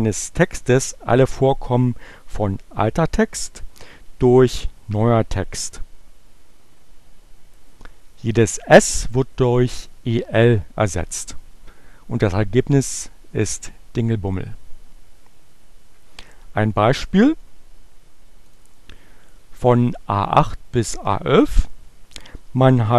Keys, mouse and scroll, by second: 8.0 Return, 10.8 click, 18.3 click.